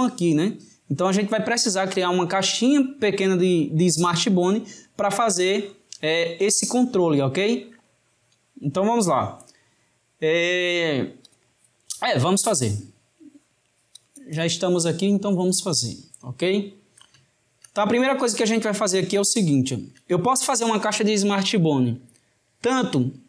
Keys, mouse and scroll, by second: 12.5-15.5 drag, 16.4-22.5 shift+middle drag.